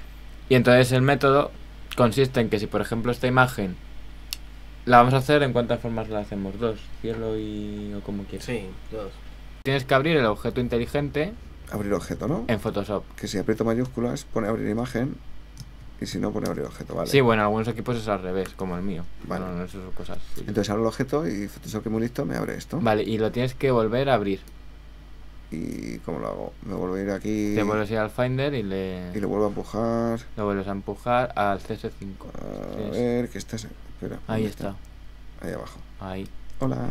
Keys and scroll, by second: 25.8 super+Tab.